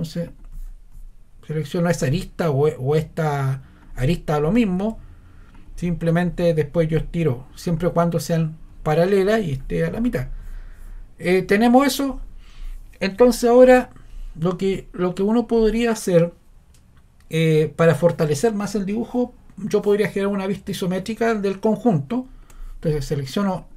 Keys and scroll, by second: 22.5 ↺.